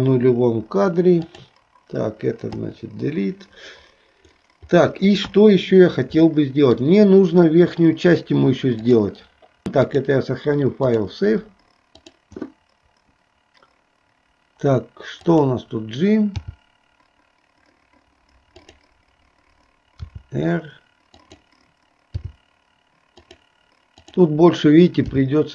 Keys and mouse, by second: 6.5 shift+middle click, 8.9 click, 12.0 click, 15.3 click, 24.1 click.